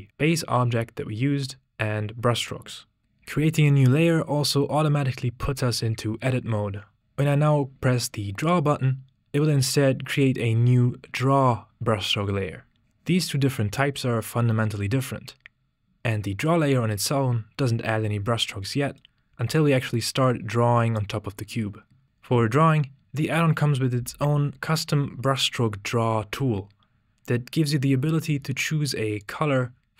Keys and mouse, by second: 19.3 x, 29.2 click.